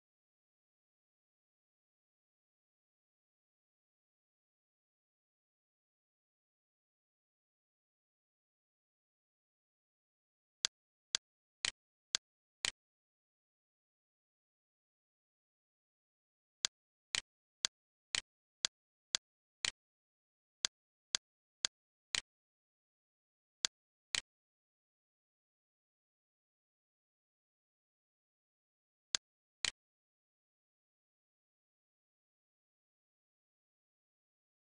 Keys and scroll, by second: 1.3-3.0 typing, 5.9 4, 7.0 1, 7.3 3, 8.1 shift+8, 8.5 2, 8.8 Return, 15.2 e, 24.6 Return, 34.3 F10.